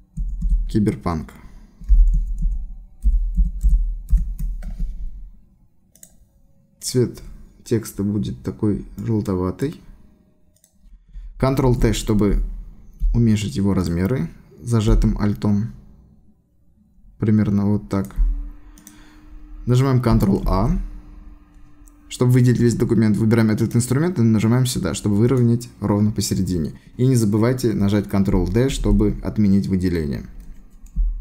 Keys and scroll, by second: 0.2 shift+c, 0.4 shift+y, 1.7-4.6 typing, 11.6 ctrl+t, 20.4 ctrl+a, 28.7 ctrl+d.